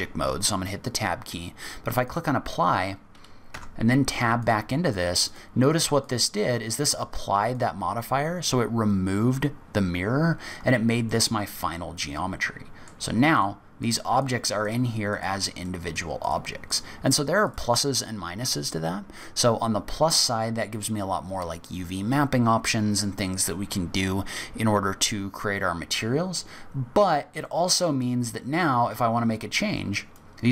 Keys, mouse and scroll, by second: 2.0 click, 3.5 Tab, 4.3 click, 4.8 click, 5.2 click, 5.6 click, 6.0 click, 6.7 click, 7.5 click, 10.1-10.7 scroll up 3, 11.0 middle click, 13.3 click, 13.8 click, 14.1 click, 14.6 click, 15.0 click, 15.6 middle click, 16.1 click, 16.6 click, 17.0 click, 17.4 click, 26.8-28.0 scroll down 3, 27.4 middle click, 28.6 middle click, 29.9 click.